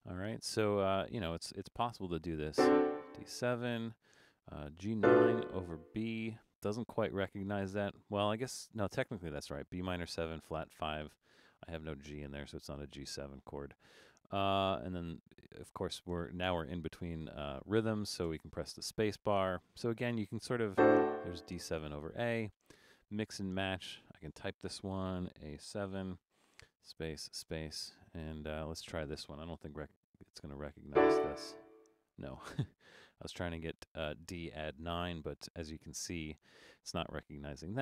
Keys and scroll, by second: 18.3 space, 23.5 space, 25.4 shift+a, 25.8 7, 26.6 space.